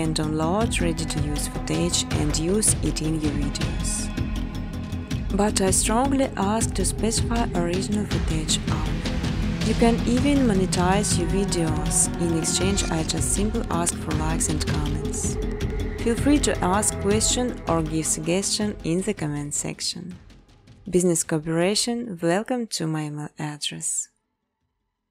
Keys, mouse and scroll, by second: 1.4 space, 1.8 space, 2.8 space, 5.2 click, 5.3 space, 6.9 space, 7.1 scroll, 7.3 space, 8.0 space, 8.2 scroll, 8.3 space, 9.6 space, 10.0 space, 11.5 space, 12.9 click, 13.3 scroll, 13.3 right click, 16.5 click, 17.1 space, 19.6 space, 19.8 space, 21.6 space, 21.9 space, 23.2-25.1 typing.